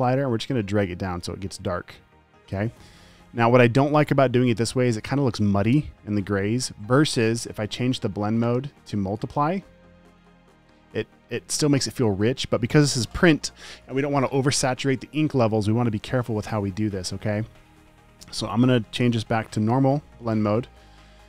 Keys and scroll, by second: 19.9 alt+shift+n.